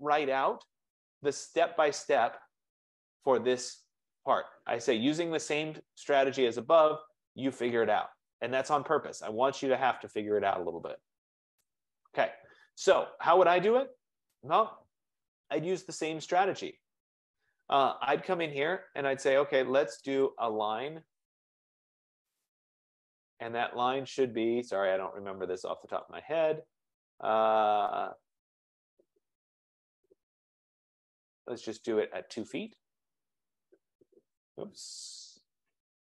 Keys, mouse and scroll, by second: 2.1-3.4 scroll down 5, 3.4 scroll down 1, 3.5 scroll, 6.0 click, 7.9-11.1 drag, 11.9-13.9 drag, 15.5-16.1 scroll down 4, 16.5-17.0 scroll up 3, 17.0 scroll, 20.3 click, 22.5 click, 26.2 click, 33.5 click, 35.9 ctrl+z.